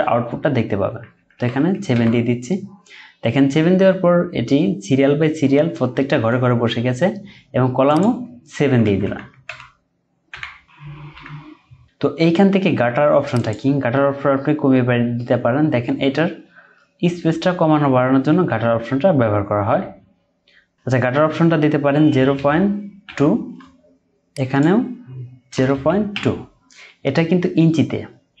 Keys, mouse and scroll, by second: 8.4-9.1 typing, 18.4-19.1 typing, 22.1-23.0 typing, 25.5 typing.